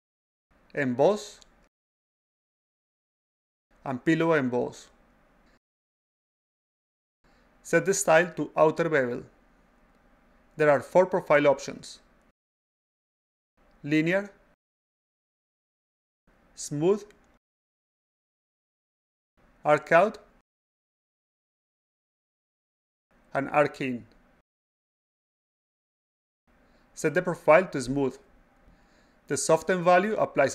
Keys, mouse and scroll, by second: 0.6 click, 1.7 click, 3.7 click, 5.0 click, 8.0 click, 9.8 click, 12.9 click, 13.8 click, 16.1 click, 17.2 click, 19.4 click, 20.6 click, 22.9 click, 24.5 click, 27.0 click, 28.2 click.